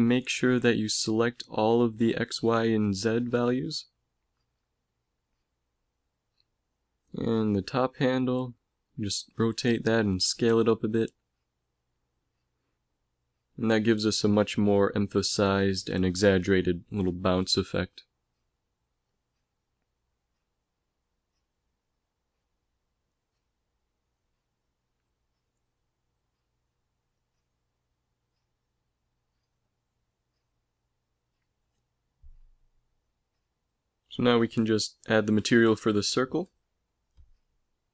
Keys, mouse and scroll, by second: 4.0 r, 5.5 click, 7.5 a, 7.8 b, 9.8 r, 11.2 s, 14.7 a, 17.7 click, 20.2 alt+a, 21.0 alt+a, 22.0 alt+a, 22.8 alt+a, 23.5-24.2 scroll down 1, 24.2-24.6 scroll down 1, 24.8 ctrl+s, 30.7 click, 32.1-34.5 middle drag.